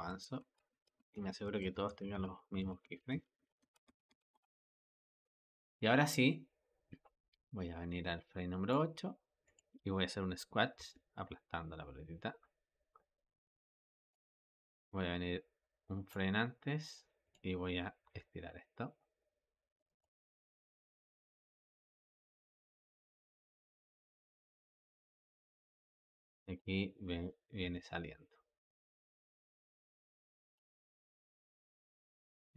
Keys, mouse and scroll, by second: 0.2 Up, 0.4-4.9 typing, 0.6 Up, 0.8 Up, 1.7 Down, 2.0 Down, 2.2 Down, 2.5 Down, 2.7 Down, 3.0 Down, 3.2 Down, 3.5 Down, 3.7 Down, 3.9 Down, 4.2 Down, 7.3-9.4 drag, 10.6 g, 14.7-17.2 drag, 17.9 g, 20.7 click, 21.0 g, 22.6 click, 22.9 g, 24.5-27.5 drag, 27.5 g, 30.9 click, 31.2 g.